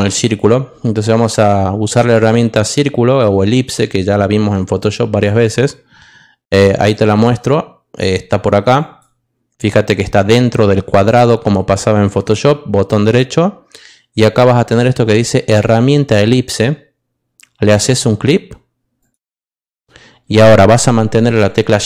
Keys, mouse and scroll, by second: 3.2-5.2 drag, 12.0 right click, 17.7 click.